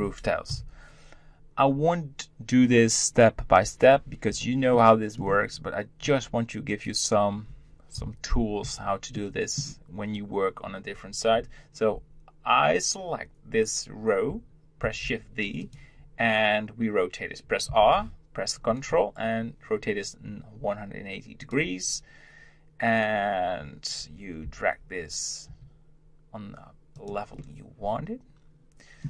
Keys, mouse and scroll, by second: 0.5 KP_1, 4.7-5.5 shift+middle drag, 5.5-6.6 scroll up 1, 6.6 click, 9.1-12.2 shift+middle drag, 14.8 shift+d, 17.6 r, 27.4-29.0 middle drag.